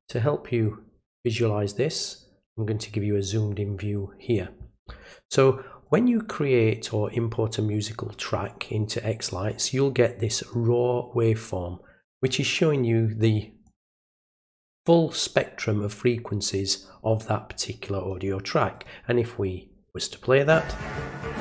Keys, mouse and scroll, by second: 1.0 click, 5.8-9.4 drag, 10.5-12.2 drag, 13.6 click, 14.5-18.1 drag, 18.7 click.